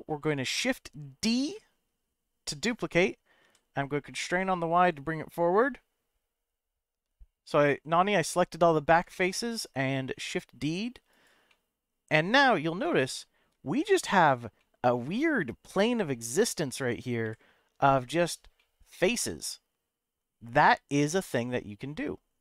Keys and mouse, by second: 1.2 shift+d, 3.4 y, 11.1 click, 11.6 middle click, 13.0 shift+middle click, 14.7-16.6 middle drag, 17.2 KP_Decimal, 18.7-22.4 middle drag.